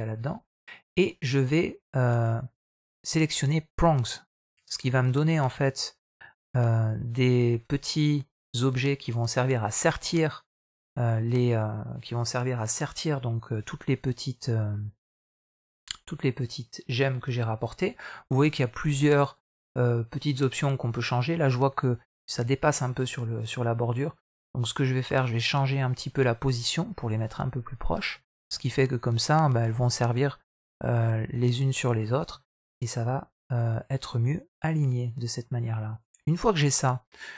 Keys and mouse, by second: 4.1 drag, 4.6 middle drag, 5.3-9.8 middle drag, 13.4-17.2 middle drag, 25.0-27.9 drag, 28.2 middle click, 28.9 middle click, 31.1 middle click, 32.3-37.3 middle drag.